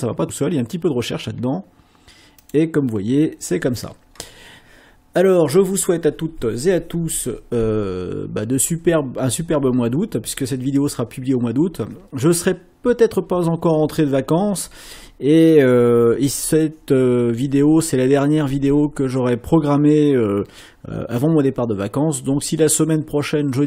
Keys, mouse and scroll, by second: 2.4 click.